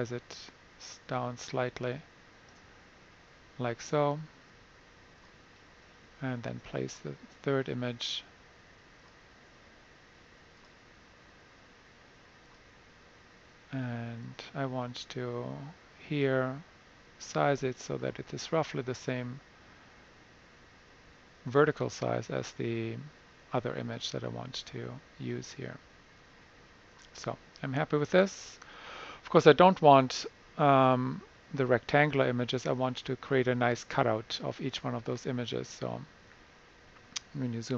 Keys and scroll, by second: 37.7 super+=.